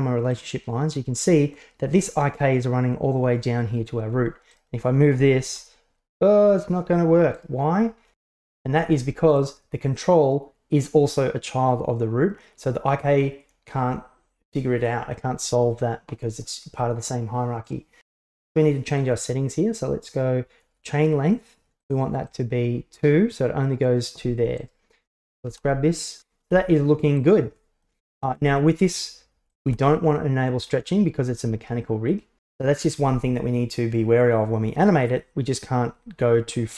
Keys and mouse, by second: 1.3 middle click, 4.6-5.5 right drag, 5.5 g, 8.4 alt+g, 9.4 right click, 17.7 right click, 18.9 click, 22.0 click, 22.3 click, 24.6 right click, 25.5 g, 26.5 g, 29.7 g.